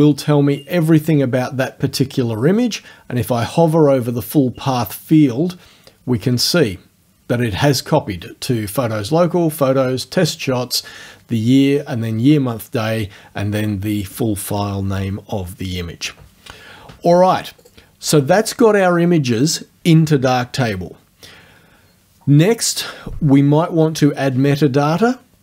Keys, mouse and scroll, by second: 17.6 click.